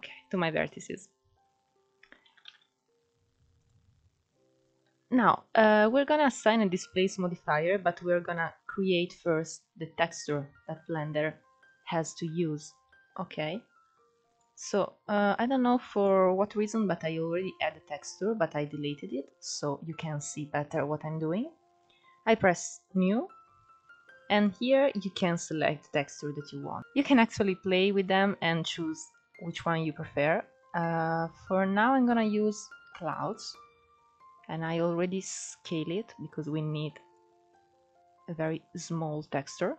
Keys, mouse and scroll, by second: 2.3 Tab, 2.9-3.3 scroll down 3, 3.3 alt+z, 4.4 click, 6.0-6.6 scroll up 1, 6.6-10.1 shift+middle drag, 10.1-13.1 drag, 15.2-18.5 drag, 23.7-26.8 drag, 35.5-39.7 drag.